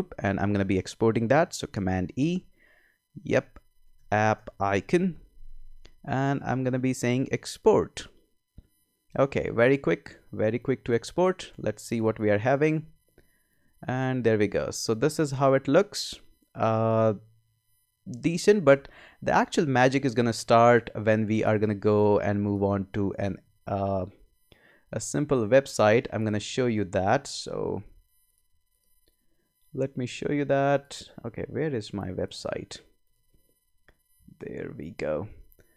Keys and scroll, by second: 1.6 super+e, 3.6-5.0 typing, 15.1 space, 17.9 space.